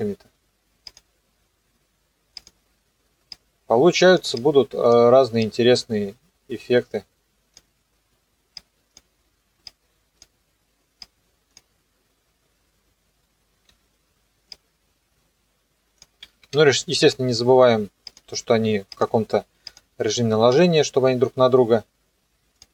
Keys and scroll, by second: 13.7 u.